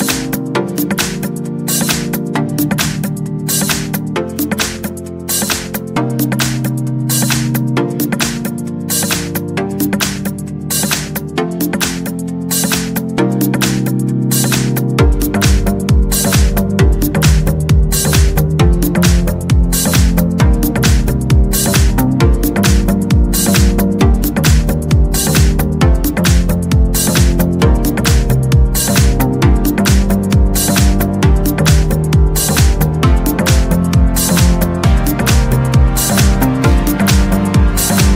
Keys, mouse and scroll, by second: 0.9 click, 1.8 click, 2.7 scroll up 2, 2.7-3.1 scroll down 2, 4.8 scroll down 1, 5.2-6.4 scroll up 3, 9.0 click, 10.3 click, 11.8 1, 12.3 0, 13.2 click, 14.1-14.6 scroll down 1, 15.1 scroll down 1, 15.5-15.8 scroll up 2, 19.2 click, 19.8 scroll down 1, 20.4 scroll up 1, 21.7 click, 23.0 click, 24.6 click, 26.0 click, 26.7 scroll down 1, 26.9 scroll up 1, 27.0-28.1 scroll down 2, 28.1-28.9 scroll up 1, 28.9 scroll down 1, 29.5 click, 31.0 click, 32.0 scroll up 1, 32.2-32.5 scroll down 1, 32.5 scroll up 1, 33.0-33.7 scroll down 1, 34.7 click, 36.1-36.6 scroll down 2, 37.7 0.